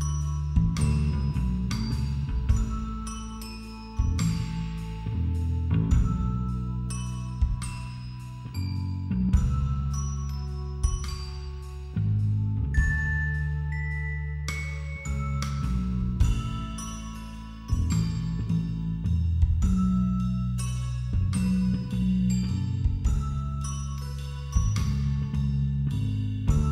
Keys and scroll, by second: 0.5 [, 2.6 ctrl+=, 3.0 space, 4.0 [, 4.3 ctrl+-, 11.5 ctrl+i, 12.1 b, 12.5 ], 17.0 [, 17.4 x, 18.7 [, 19.3 ], 19.4 [, 19.6 ], 22.2 ], 22.4 [, 24.4 ctrl+=, 25.8 ctrl+-, 25.9 ctrl+=, 26.1 [.